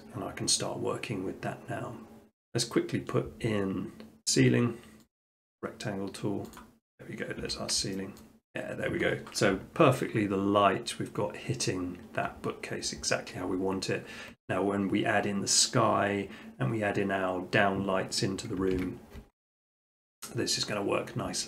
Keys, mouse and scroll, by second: 5.1 click, 6.6 click, 7.4 Tab, 8.2 middle click, 18.6 click, 18.8 alt+a.